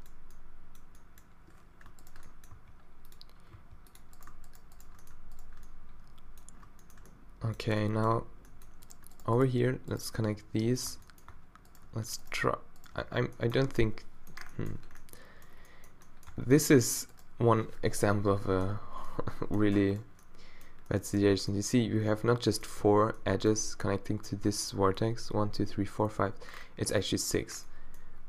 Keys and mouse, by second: 2.5 g, 3.5 g, 6.7-7.8 middle drag, 10.2 f, 10.9 Tab, 11.3 Tab, 13.0 f, 13.6 Tab, 16.3 Tab, 18.0 -, 18.5 middle click, 18.8 z, 26.5 middle click.